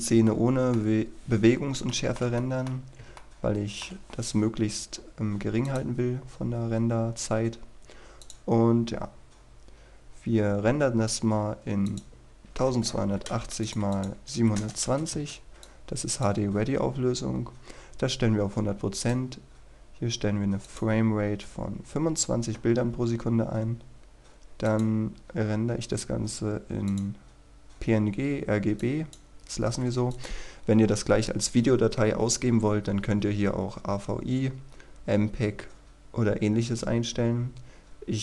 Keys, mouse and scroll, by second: 0.3 middle click, 0.9-1.5 scroll down 1, 1.5-1.9 scroll up 1, 2.4 middle click, 2.8 scroll up 1, 3.2 shift+middle click, 5.7 click, 6.0-8.3 scroll up 1, 8.3 click, 12.5 KP_1, 12.7 KP_2, 13.7 click, 14.2 KP_7, 14.6 KP_0, 15.2 Return, 15.7 click, 23.2-23.9 scroll down 1, 24.7 click.